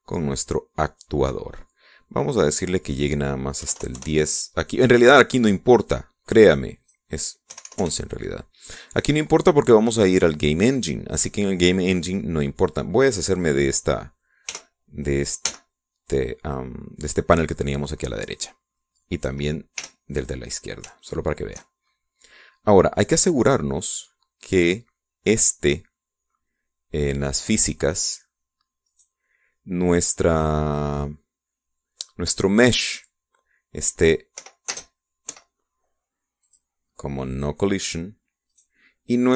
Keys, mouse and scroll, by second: 0.1 click, 3.5 click, 4.6 KP_1, 4.7 KP_0, 5.0 KP_Enter, 7.8 click, 8.5 KP_1, 8.8 KP_Enter, 15.5 t, 16.4 n, 20.8 t, 22.0 shift+click, 22.9 shift+scroll up 2, 24.5 click, 25.5 click, 29.9 right click, 35.4 p, 35.7 space, 36.3 Escape, 37.4 click, 38.4 click.